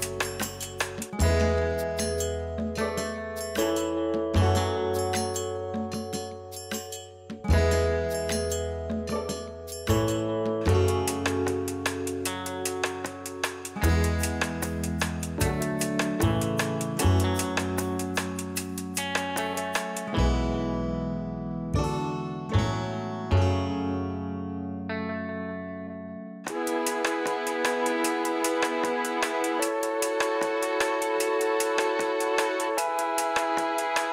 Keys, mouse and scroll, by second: 0.4-7.9 middle drag, 1.8 KP_3, 3.7 ctrl+r, 7.9 click, 8.7 ctrl+r, 11.3-12.4 middle drag, 12.4 click, 13.5 ctrl+r, 16.2 middle click, 16.9 click, 17.9 ctrl+r, 18.7 click, 19.6-20.1 scroll up 1, 20.1-21.4 shift+middle drag, 20.6-21.4 scroll up 1, 21.4-22.4 drag, 22.4 g, 25.3 click, 26.7 g, 28.9 click, 30.6 g, 32.2 click.